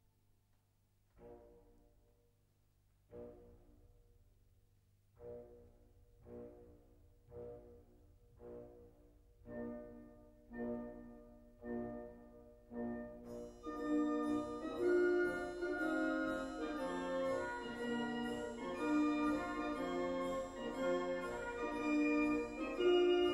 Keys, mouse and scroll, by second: 1.5 click, 2.7 middle click, 3.5 click, 4.2-4.6 scroll up 1.